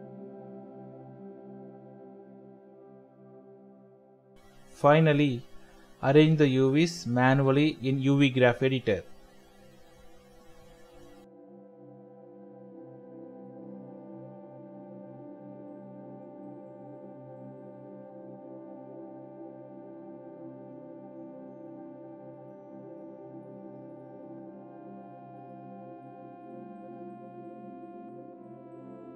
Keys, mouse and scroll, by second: 1.6 g, 11.0 ctrl+l, 11.6-12.4 scroll down 1, 12.5 shift+click, 13.5 ctrl+l, 14.0-15.2 scroll up 1, 15.3 shift+middle click, 17.4 typing, 20.9-21.5 scroll up 1, 21.6 shift+middle click, 26.3 l, 27.3 shift+middle click.